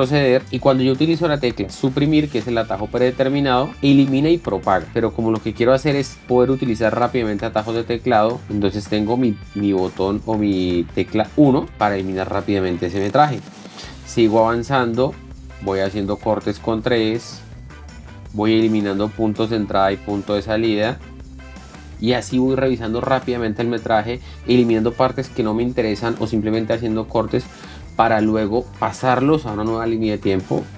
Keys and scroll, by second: 0.3 ctrl+z, 3.6 Delete, 5.5 ctrl+z, 12.0 KP_1, 13.6 l, 15.7-21.5 typing.